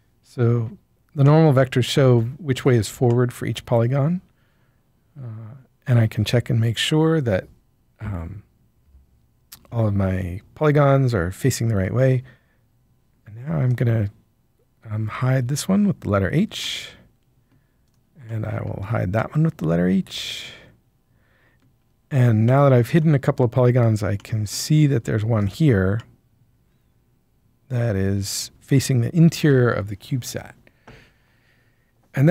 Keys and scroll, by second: 15.0 h.